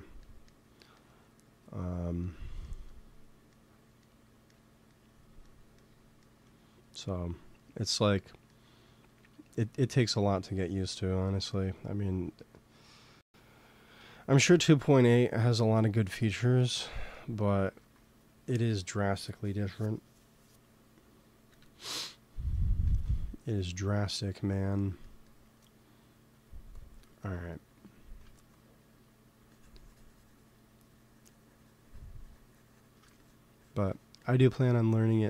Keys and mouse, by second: 11.7 f, 12.2 f, 12.9-14.7 drag, 14.0 ctrl+z, 14.2 f, 16.7-19.5 drag, 17.7 ctrl+s, 21.4 KP_1, 22.7 ctrl+s, 23.8-25.7 middle drag, 26.3-28.2 drag, 28.5 f, 29.4-31.3 drag, 33.1-35.2 drag.